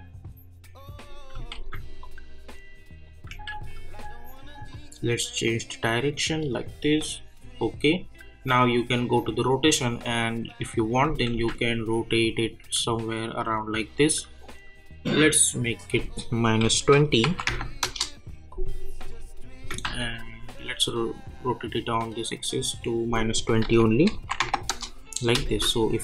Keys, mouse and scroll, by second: 1.5 ctrl+z, 2.0-3.5 drag, 3.5 ctrl+z, 4.7-11.3 drag, 11.3 ctrl+z, 11.7-15.9 drag, 16.7 -, 17.8 Return, 18.5-19.8 drag, 19.8 ctrl+z, 20.2-22.8 drag, 23.6 -, 24.7 Return, 25.4 space.